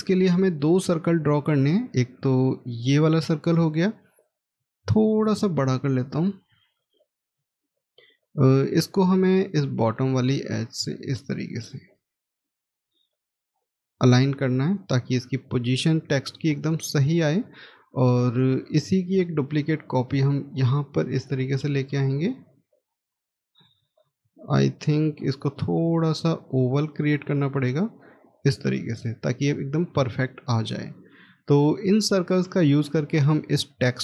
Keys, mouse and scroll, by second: 4.6-5.6 scroll up 1, 5.9 shift+click, 7.6-11.5 shift+scroll down 1, 12.2 scroll up 1, 17.4 scroll down 1, 18.1 middle click, 23.2 scroll up 1, 24.3-25.3 scroll down 1, 26.2 shift+click.